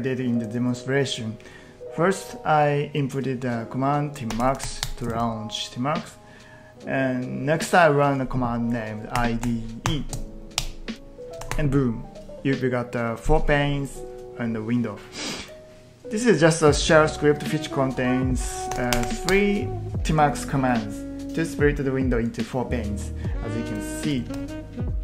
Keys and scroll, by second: 4.0-5.1 typing, 8.9-10.3 typing, 10.6 Return, 11.4 ctrl+t, 11.5 ctrl+t, 18.2-19.2 typing, 19.3 Return, 24.1 ctrl+t.